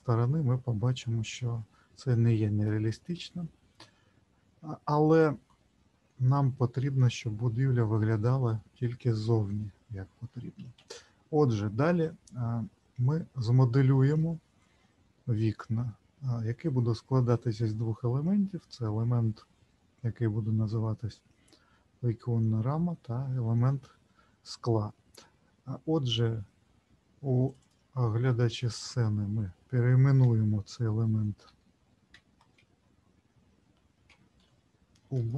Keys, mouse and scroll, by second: 4.9-6.5 scroll down 23, 10.7 ctrl+z, 12.8-13.6 scroll up 1, 14.1 middle click, 27.5 click, 27.6 click, 35.2 BackSpace.